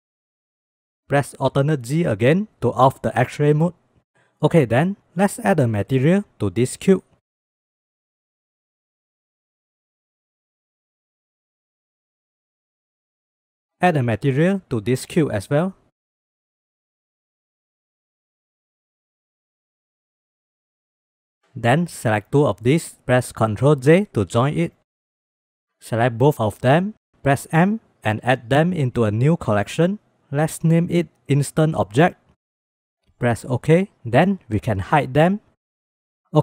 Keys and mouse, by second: 0.1 shift+click, 0.5 g, 1.9 alt+z, 3.1-3.4 drag, 3.6 click, 3.9 click, 4.6 click, 7.5-9.7 drag, 10.8-12.2 drag, 21.7 click, 23.5 ctrl+j, 25.1 shift+click, 25.8 drag, 25.9 click, 26.5 shift+click, 27.5 m, 35.3 click.